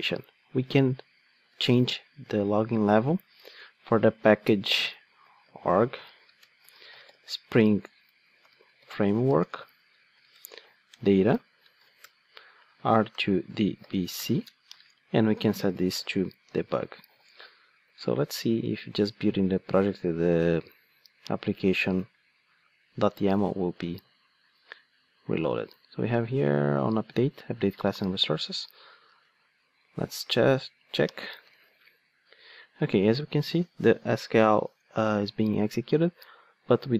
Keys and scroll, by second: 2.3 Return, 17.2 super+F9.